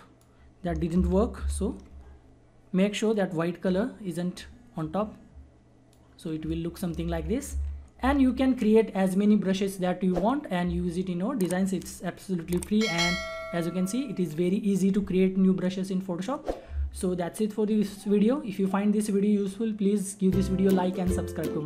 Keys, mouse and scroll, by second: 0.9 ctrl+z, 3.1-6.3 drag, 7.0 ctrl+z.